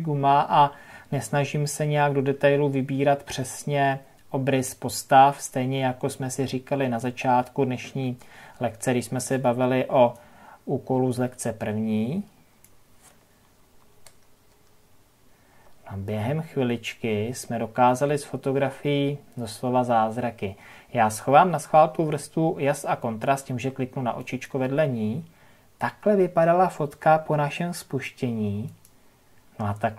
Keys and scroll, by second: 13.5 ctrl+KP_Subtract.